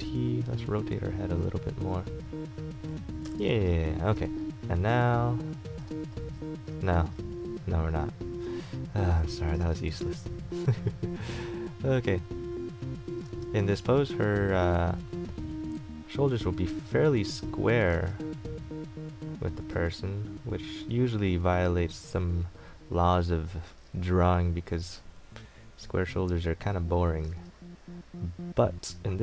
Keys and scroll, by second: 0.0 ctrl+t, 3.4 KP_Enter, 4.3 a, 6.3 ctrl+z, 6.9 ctrl+z, 9.8 ctrl+z, 18.1 ctrl+z, 23.9 ctrl+z, 27.5 ctrl+z.